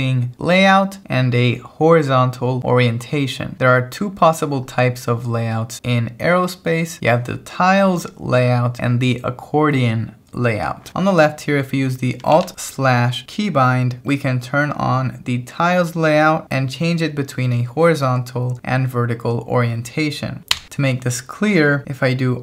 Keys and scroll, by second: 12.3 shift+v, 20.5 Escape.